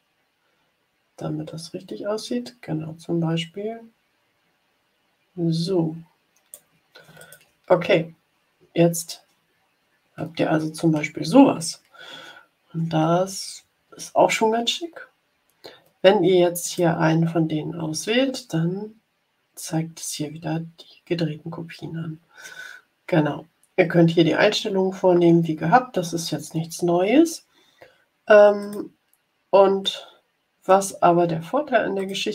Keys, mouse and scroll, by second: 7.1 click, 8.6 ctrl+scroll down 2, 9.4 scroll down 2, 12.2 ctrl+scroll up 2, 16.6 click, 28.5 click, 29.7-30.8 middle drag, 31.9 click.